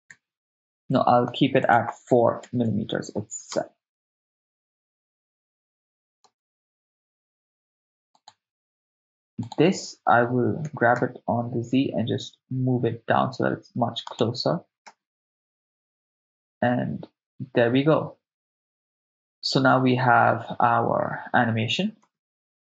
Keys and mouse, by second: 0.1 shift+space, 1.6 click, 3.6 shift+space, 6.2 shift+space, 8.2 click, 8.2 right click, 9.5 click, 9.5 right click, 10.7 g, 11.0 z, 14.1-14.7 drag, 14.9 shift+space, 22.0 shift+space.